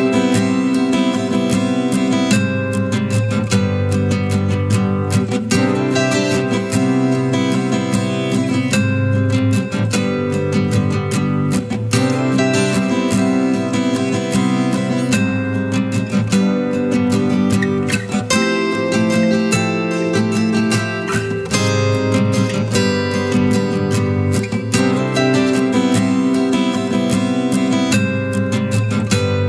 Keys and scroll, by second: 0.0 ctrl+z, 0.1 ctrl+z, 6.7 ctrl+z.